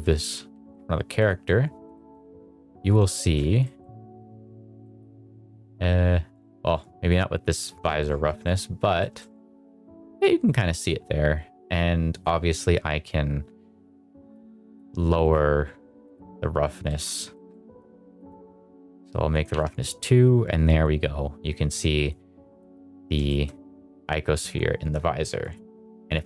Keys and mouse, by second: 0.2 s, 1.8 middle drag, 3.0 shift+middle drag, 3.5 middle drag, 4.7 middle drag, 7.3 g, 7.7 click, 8.9 middle drag, 12.0 click, 14.2 click, 15.1-16.0 drag, 16.7 middle click, 17.3 middle click, 18.1 click, 19.2 click, 22.1 click, 23.2 shift+middle drag.